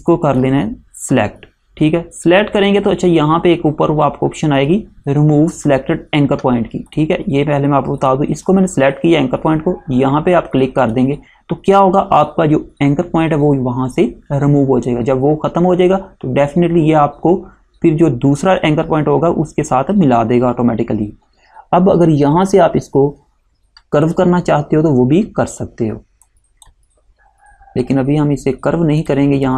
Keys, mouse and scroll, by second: 7.0 click, 10.9 click, 24.2 click.